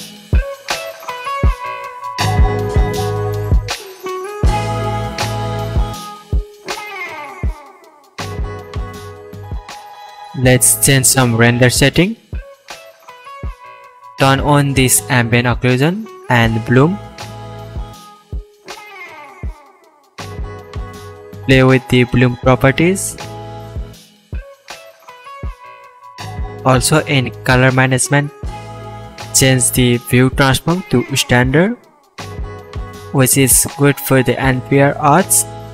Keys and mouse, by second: 2.9 middle click, 4.4 click, 4.7 shift+click, 5.0 ctrl+l, 5.3 alt+a, 5.5-7.2 ctrl+middle drag, 7.2 click, 7.3-8.6 middle drag, 8.6 KP_0, 8.9 shift+middle click, 9.2 shift+middle click, 10.5 click, 12.5 click, 15.0 click, 15.4 click, 18.1 click, 19.2-30.4 drag, 22.4 BackSpace, 22.5 BackSpace, 32.2-33.1 shift+middle drag.